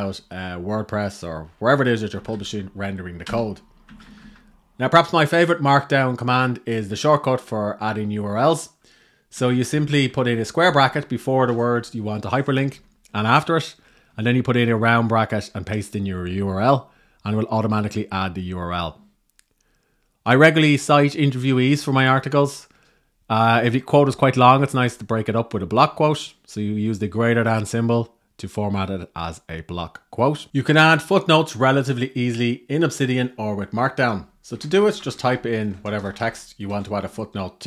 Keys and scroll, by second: 1.9 shift+Down, 3.6 Down, 9.1 Right, 9.7 Right, 10.3 Right, 11.1 Right, 12.4 Right, 13.8 Right, 14.8 Right, 34.0-35.3 typing.